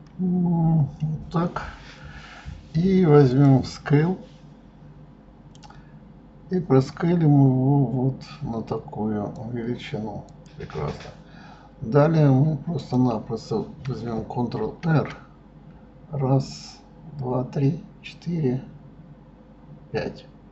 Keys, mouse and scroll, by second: 0.2 KP_3, 3.4 click, 5.7 click, 10.3 click, 12.8 click, 14.7 ctrl+r.